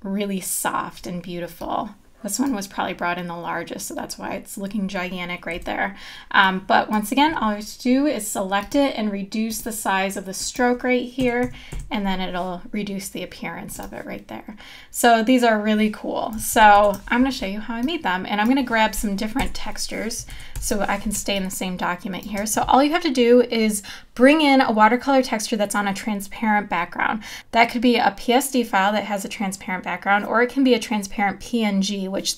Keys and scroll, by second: 5.5 v, 11.2 KP_Decimal, 11.7 KP_Enter, 16.7 super+-, 19.4 BackSpace, 20.6 super+=, 21.2 space.